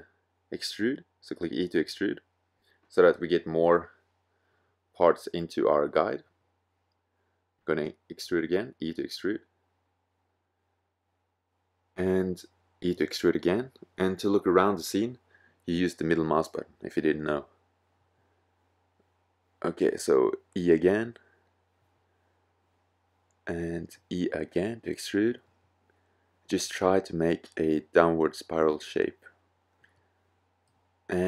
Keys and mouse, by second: 0.0-1.6 drag, 3.5 middle click, 3.6 g, 4.5-6.5 drag, 6.5 e, 9.6 click, 10.1-11.4 middle drag, 13.1 e, 13.3 click, 14.6 e, 17.2-18.6 middle drag, 19.4 e, 21.1 middle click, 22.9 e.